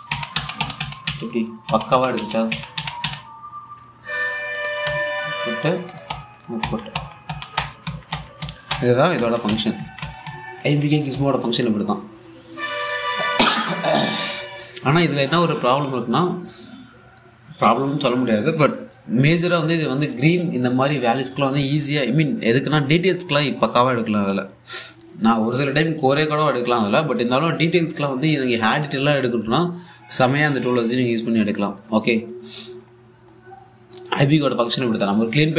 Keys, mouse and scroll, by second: 20.1-20.6 scroll down 1, 20.6-21.0 scroll up 1, 21.6-24.7 drag, 29.3 scroll down 1, 29.6 alt+click, 30.1 scroll down 1, 30.2 alt+click, 30.5-31.2 scroll up 1, 31.2 click, 31.6-31.9 scroll up 1, 32.0 alt+click, 34.6 space, 34.7 alt+click.